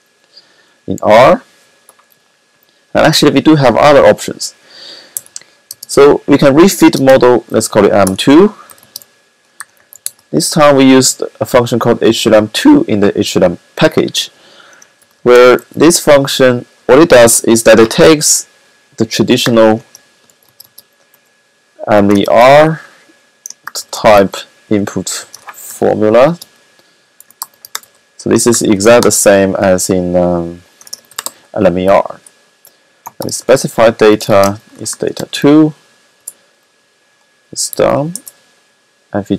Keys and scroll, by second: 4.9-5.2 typing, 6.5 typing, 7.9-10.4 typing, 14.7 typing, 17.6 typing, 19.2 typing, 22.0 typing, 23.6-24.5 typing, 25.5 typing, 26.8-29.0 typing, 30.4-35.6 typing, 37.4-38.2 typing.